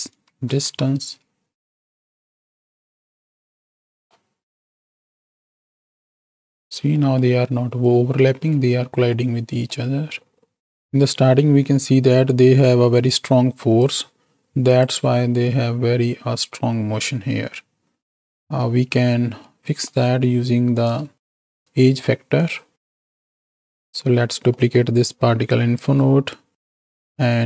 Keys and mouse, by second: 0.5 shift+Right, 0.6 shift+Left, 1.2 space, 3.6 click, 7.0 click, 9.7 middle click, 13.2-14.6 drag, 15.2 space, 18.8 space, 19.5 middle click, 21.3 shift+d, 23.1 alt+p, 24.5 click, 25.1 click, 27.2-27.4 drag.